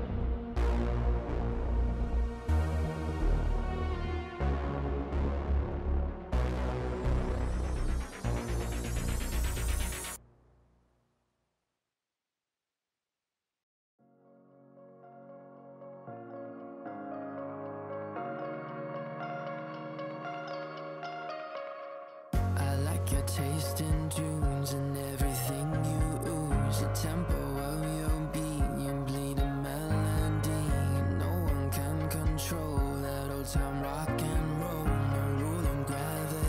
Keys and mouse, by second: 0.1 click, 1.1 click, 1.6 Return, 1.8 ctrl+[, 3.4 space, 3.9 click, 4.9 click, 5.5 alt+shift+click, 6.0 click, 6.7 click, 11.5 space, 12.7 space, 12.8 click, 13.4 space, 13.4 click, 13.8 alt+click, 15.0 click, 15.8 click, 17.3 Return, 17.8 click, 18.7 click, 19.2 click, 22.1 click, 23.0 click, 24.7 click, 25.9 ctrl+z, 26.1 click, 27.3 click, 28.2 click, 29.2 click, 29.7 click, 29.9 click, 30.1 click, 30.8 click, 31.7 click, 32.0 click, 32.5 click, 33.4 click, 34.2 click, 34.4 click, 34.6 click, 35.0 click, 35.7 click, 36.3 click.